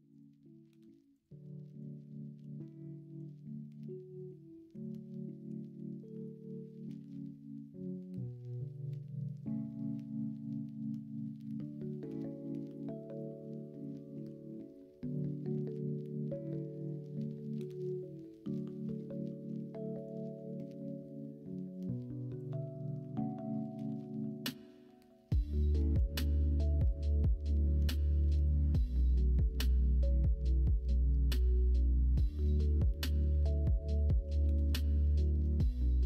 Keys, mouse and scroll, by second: 0.6 Tab, 1.6 middle drag, 2.3 KP_1, 3.0 KP_3, 4.7 Tab, 12.0 a, 13.4 l, 14.2 l, 15.6 g, 23.7 g, 25.4 ctrl+z, 26.2 g, 29.2-30.4 drag, 30.4 g, 34.2 g.